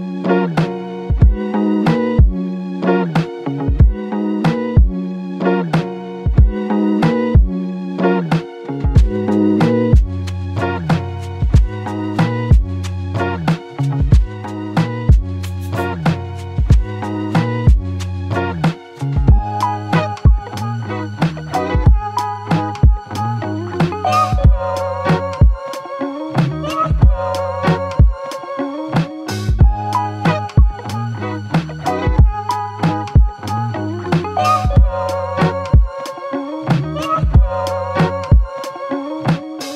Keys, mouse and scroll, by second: 11.9 alt+click, 13.0 alt+click, 38.6 alt+click.